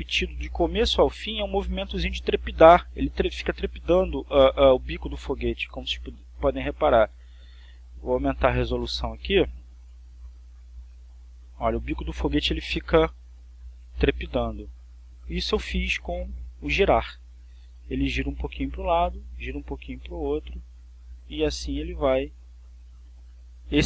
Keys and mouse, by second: 6.0 click, 8.2 click, 10.5 click, 11.2 click, 14.3 click, 15.2 click, 16.6 click, 18.3-23.8 drag.